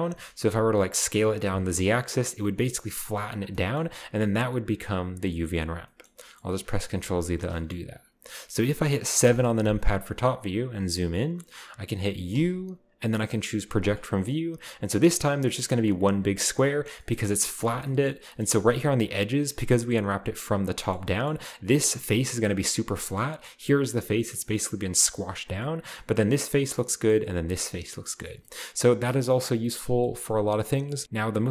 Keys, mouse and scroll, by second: 0.0 r, 0.9 click, 1.2 s, 1.4 z, 3.3 click, 3.7 click, 3.7-4.3 scroll up 1, 4.3-5.8 middle drag, 4.3-5.8 scroll up 1, 6.6 ctrl+z, 6.9 ctrl+z, 7.3 ctrl+middle click, 7.3-8.1 ctrl+scroll down 1, 9.2 KP_7, 10.6-11.1 scroll up 2, 11.1-12.3 shift+middle drag, 12.3 u, 13.8 click, 14.5-16.5 scroll down 1, 16.8-17.8 scroll down 1, 16.9 middle click, 18.1-19.4 scroll up 1, 19.7-21.1 middle drag, 21.9 middle click, 22.7-25.4 scroll up 1, 25.4-26.3 scroll down 2, 26.3-27.3 right drag, 27.4 right click, 28.4-29.5 scroll up 1, 29.5 middle drag, 29.7-31.0 scroll down 1.